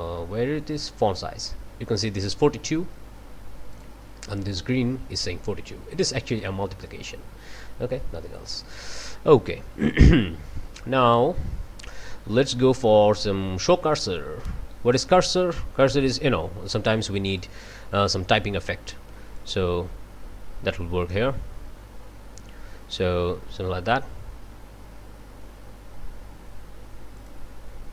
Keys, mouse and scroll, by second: 2.8 scroll up 2, 3.7 click, 6.0-8.8 drag, 9.8 scroll down 2, 10.4 scroll down 2, 14.9 click, 16.1-16.6 scroll down 4, 17.3-18.6 drag, 19.4 click, 27.1 click.